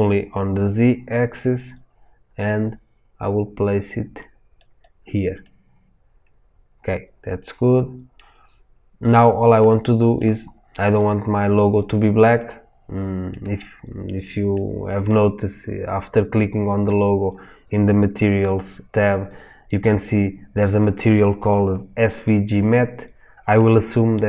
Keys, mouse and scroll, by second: 5.3-5.8 middle drag, 5.8 middle click, 6.7-10.9 middle drag, 8.1-9.6 scroll down 2, 10.9-12.3 drag, 12.3-16.3 middle drag, 16.3 click.